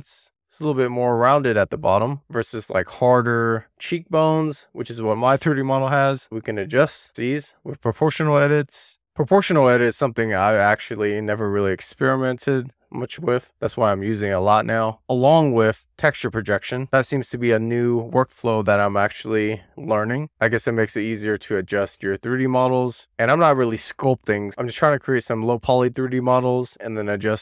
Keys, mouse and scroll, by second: 0.4 middle click, 0.5 alt+z, 0.7-1.2 scroll up 2, 1.2-2.5 middle drag, 2.5-3.0 scroll down 1, 3.0 scroll up 1, 3.3-3.7 scroll down 1, 3.7 scroll up 1, 4.0-4.6 scroll down 1, 4.6 click, 5.0 click, 8.1 click, 8.6 alt+z, 9.0 alt+z, 9.8 click, 10.4 super+z, 11.1 click, 11.7-12.1 scroll up 1, 16.7 middle click, 18.7-19.5 scroll up 1, 19.5 middle click, 19.8-20.2 scroll down 4, 20.2 middle click, 20.6 shift+middle click, 21.7 middle click, 22.5 click, 22.8 middle click, 23.6 click, 24.5 super+z, 24.7 middle click, 25.9 click, 26.8 middle click.